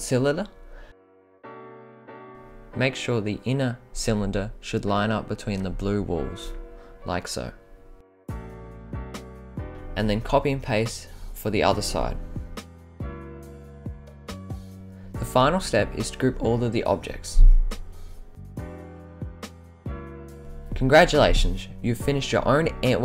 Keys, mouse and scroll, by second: 0.3-2.2 drag, 2.6-3.2 middle drag, 3.5-4.2 scroll, 8.7 scroll down 5, 9.3-9.7 middle drag, 9.8 scroll down 2, 10.4 ctrl+c, 10.6 ctrl+v, 12.4 middle click, 13.6 scroll up 2, 14.7-15.1 scroll down 7, 15.5 scroll up 1, 16.4-17.4 drag, 18.0 middle drag, 18.7-19.0 shift+middle drag, 19.9-20.8 right drag, 21.5 click, 22.1 click.